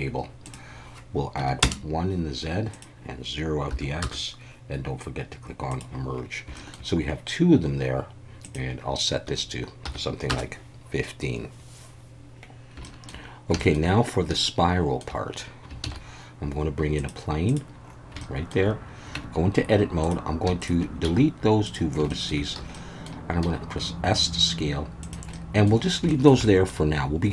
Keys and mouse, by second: 0.5-2.3 drag, 2.9-4.2 drag, 5.7 click, 6.6 shift+middle click, 8.4-10.5 drag, 12.8 shift+middle drag, 13.6 shift+middle click, 14.4-15.0 shift+middle drag, 15.8 shift+a, 18.3 shift+middle click, 19.2 Tab, 21.0 x, 22.1 shift+middle click, 22.6 a, 22.7 middle click, 23.4 s, 25.0 click, 25.3 middle click, 26.2 shift+middle click, 26.5 middle click.